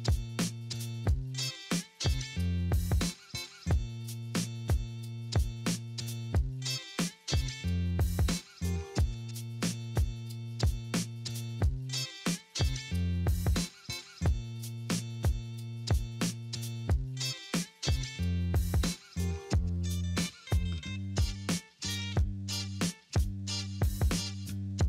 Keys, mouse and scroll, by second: 3.5 alt+middle click, 9.9 scroll down 1, 10.2 alt+middle click, 11.3 alt+middle click, 12.2-12.9 alt+scroll up 3, 12.9 alt+middle click, 17.2 alt+middle click, 21.8 alt+middle click, 24.1-24.8 alt+scroll down 1.